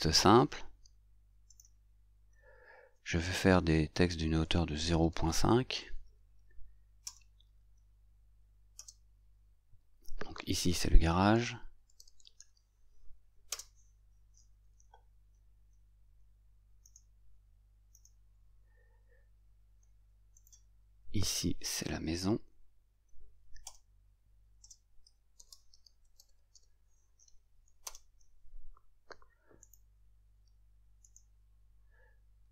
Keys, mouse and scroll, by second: 1.6 click, 4.5 shift+0, 5.1 shift+., 5.8 shift+5, 7.1 Return, 8.8 Return, 16.9 right click, 18.0 right click, 20.4 right click, 23.7 Return, 24.7 Return, 27.9 Return, 29.7 right click, 31.1 right click.